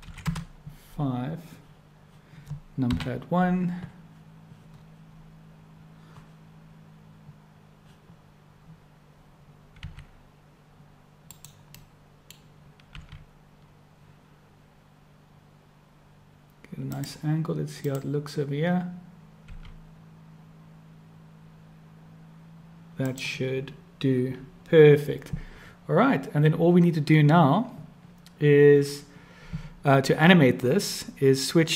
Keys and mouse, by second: 2.9 KP_1, 9.9 r, 11.8-12.5 drag, 14.3 r, 18.0 click, 19.5 r.